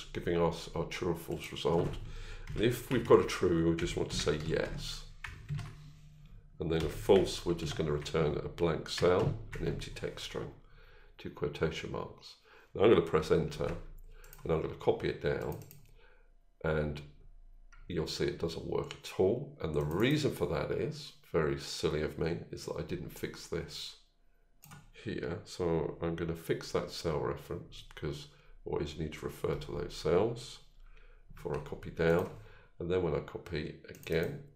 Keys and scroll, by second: 29.4 F4.